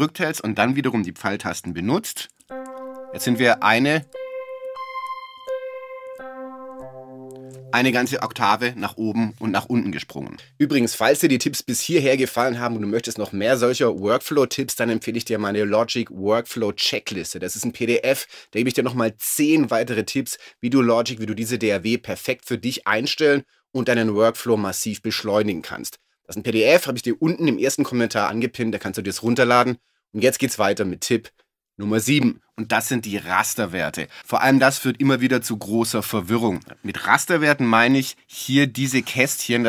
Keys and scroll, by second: 2.4 alt+shift+Up, 4.1 alt+shift+Up, 5.4 alt+shift+Down.